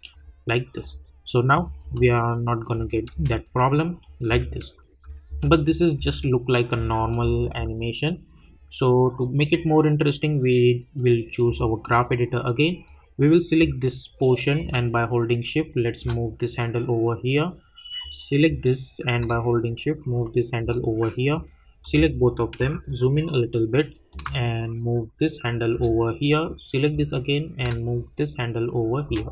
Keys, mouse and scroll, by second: 1.8 space, 5.5 click, 5.9 space, 11.6-18.0 drag, 18.0-22.6 drag, 22.6 =, 24.1-26.4 drag, 26.4-29.3 drag.